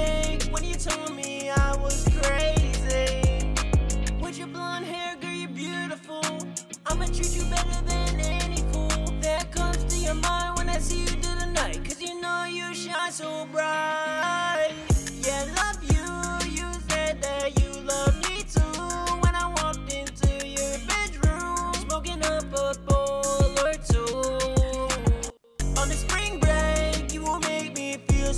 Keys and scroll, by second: 5.0 super+Tab, 7.6-9.0 typing, 10.8 shift+super+z, 11.0 shift+super+z, 14.4 ctrl+shift+Page_Down, 14.6 ctrl+shift+Page_Down.